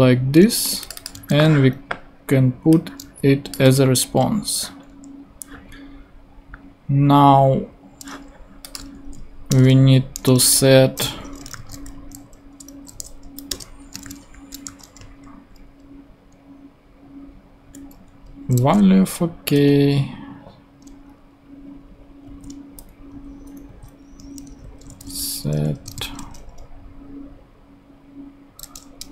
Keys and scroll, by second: 1.1 super+c, 4.5 super+v, 9.5 Return, 11.1 [, 11.5 r, 13.2 Down, 13.5 Return, 13.9 space, 14.1 s, 15.0 shift+t, 22.2 shift+Down, 23.1 shift+Up, 24.2 Right, 25.0 Left, 25.8 shift+Right, 25.9 shift+v, 29.0 Return.